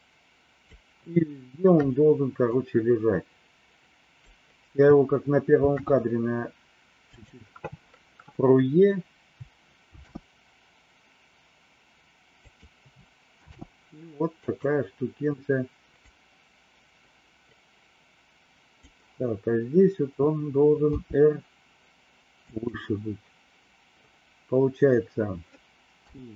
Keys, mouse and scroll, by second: 2.5-4.3 drag, 5.5 shift+d, 9.9 shift+d, 13.4 shift+d, 16.1-18.8 drag, 20.8 r, 25.9 i.